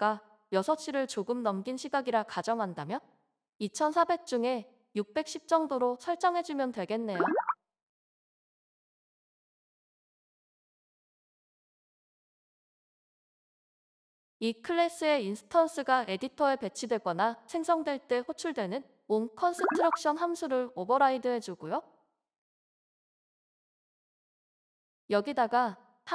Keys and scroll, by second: 0.0-8.5 typing, 17.5 ctrl+s, 19.0 Down, 19.0 Return, 19.5-21.2 typing, 22.1 ctrl+s, 24.2 alt+Return, 24.8 Return.